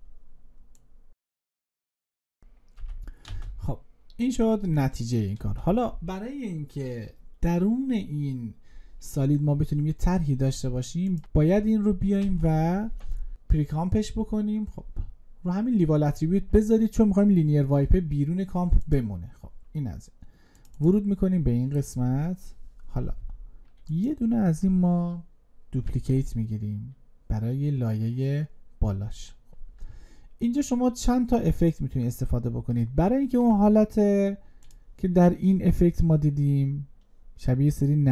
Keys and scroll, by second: 11.8 ctrl+shift+c, 25.5 ctrl+d.